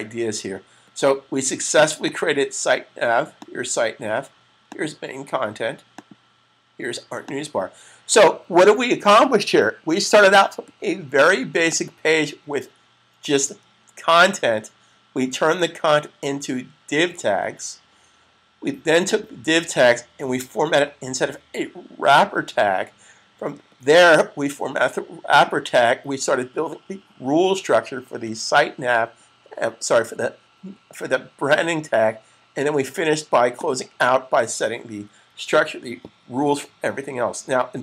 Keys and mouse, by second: 1.9 click, 11.5 click, 19.0 click, 25.1 click, 33.3 click, 35.0 super+s.